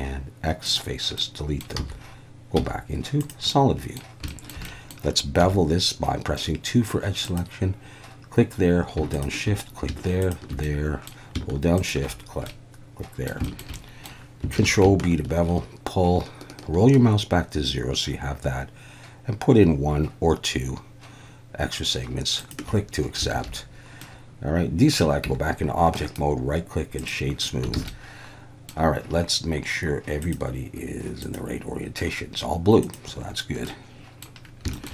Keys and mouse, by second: 1.2 middle click, 1.8 z, 2.6 z, 3.5-4.0 middle drag, 4.3 shift+middle drag, 4.6 middle click, 5.4 2, 7.2 click, 9.1 shift+drag, 10.3 shift+click, 10.6-11.1 middle drag, 11.8 shift+click, 12.5 middle click, 13.4 shift+middle drag, 13.8 middle click, 14.6 ctrl+b, 22.4 shift+click, 23.3 alt+a, 24.0-24.9 middle drag, 25.3 Tab, 26.0-27.1 drag, 27.8 alt+a, 27.9-28.7 middle drag, 30.2-33.2 drag, 33.7-34.3 middle drag, 34.7 shift+middle click.